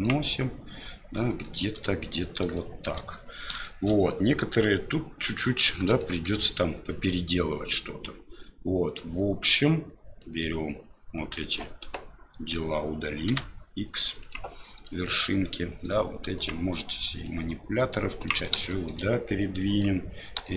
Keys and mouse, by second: 1.5 shift+middle click, 2.7 shift+middle click, 3.7 shift+middle click, 6.1 shift+middle click, 10.2-11.3 drag, 13.3 x, 15.0 click, 17.2-18.3 drag, 18.8 shift+middle click, 19.6 click, 20.4 shift+middle click.